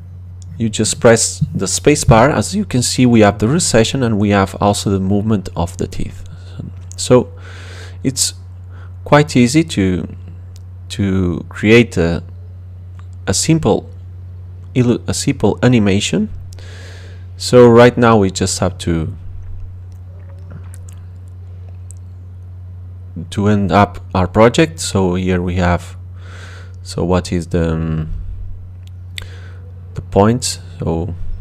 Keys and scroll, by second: 5.9 space.